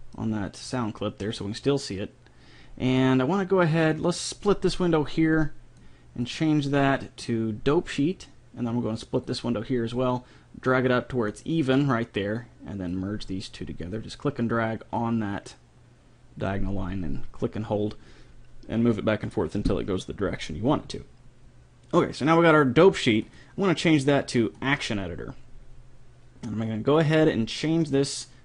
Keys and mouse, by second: 0.2 click, 0.5 click, 0.7 click, 4.1 click, 5.1 click, 9.3-11.2 drag, 12.9-14.7 drag, 15.0-16.7 drag, 23.3-25.2 drag, 27.9-28.4 drag.